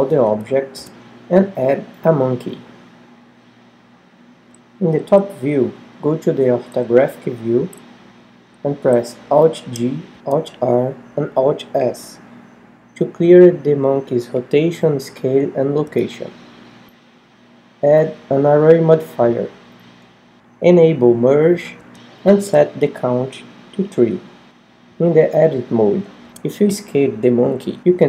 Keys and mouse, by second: 0.2 a, 0.7 x, 2.2 shift+a, 6.2 KP_7, 7.1 KP_5, 8.1-9.5 middle drag, 9.9 alt+g, 10.8 alt+r, 11.6 alt+s, 17.9-23.3 drag, 26.9 Tab, 27.6 s.